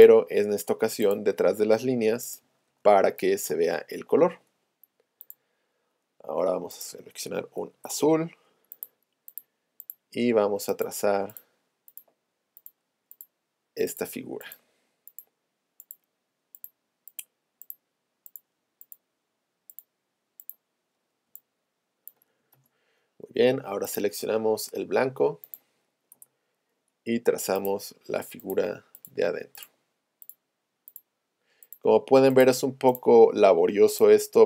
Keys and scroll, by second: 2.7 shift+super+a, 7.7 Return, 26.1 Return.